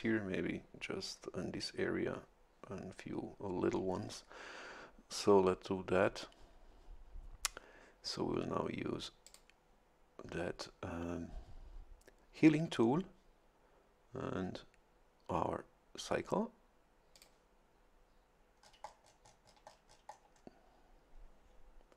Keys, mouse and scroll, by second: 9.2 click, 17.1 click, 18.6-20.6 scroll up 1.